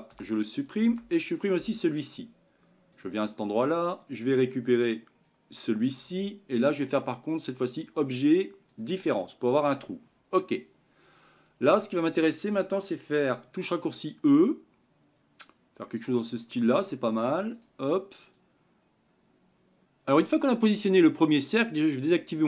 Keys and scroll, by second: 14.5 e.